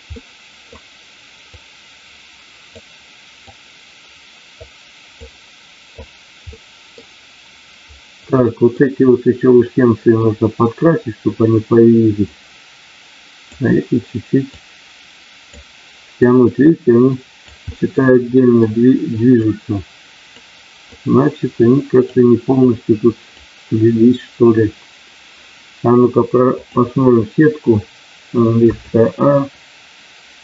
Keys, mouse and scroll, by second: 0.1 middle click, 1.5-2.7 drag, 3.4-4.5 drag, 5.1 click, 6.5 middle click, 8.4 middle click, 9.6 middle click, 12.4-13.5 drag, 14.5 click, 16.3-17.5 drag, 17.8 middle click, 19.5 click, 20.9-22.2 drag, 22.7 click, 26.6 click.